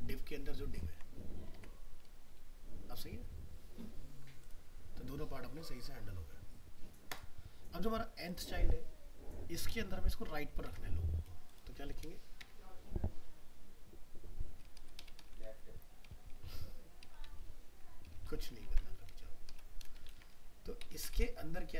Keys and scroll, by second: 1.5 alt+Tab, 10.7 alt+Tab, 18.6 ctrl+c, 20.1 ctrl+v.